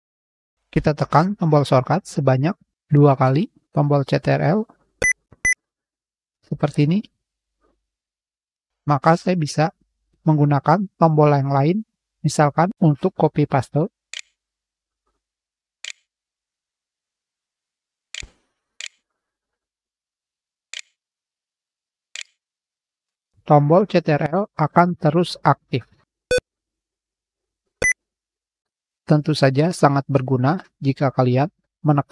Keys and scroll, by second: 9.0 ctrl+3, 13.9 ctrl+c, 14.7 ctrl+v, 17.9 ctrl+c, 18.6 ctrl+v, 21.9 ctrl+v, 26.1 ctrl+\, 29.7 shift+1.